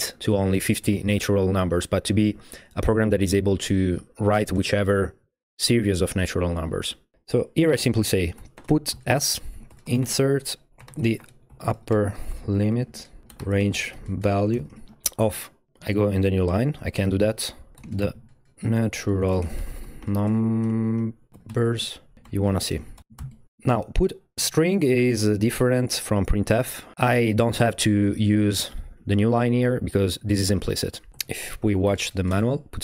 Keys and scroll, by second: 8.1-15.4 typing, 15.7 Right, 15.9 Return, 16.8-23.7 typing, 17.3 Left, 28.3 Left, 28.4 Left, 28.7 Left, 29.1-32.4 typing.